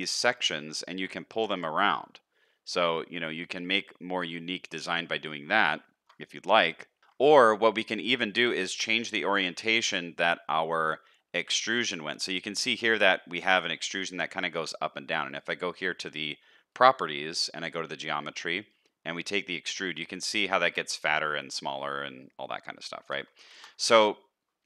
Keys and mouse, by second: 0.5 shift+middle click, 1.3 g, 5.8 shift+middle click, 6.4 middle click, 10.5 middle click, 12.4 middle click, 20.0-23.0 shift+drag, 23.5 ctrl+z.